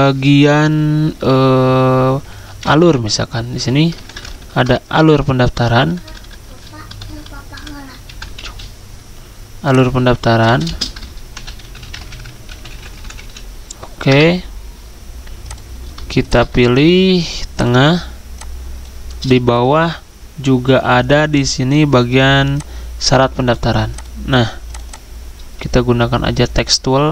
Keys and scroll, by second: 2.6 typing, 5.7-6.5 typing, 6.9 Left, 7.1 Left, 7.3 Left, 8.1 Delete, 8.3 a, 10.5 typing, 11.6 typing, 12.7-17.9 typing, 19.8 ctrl+g.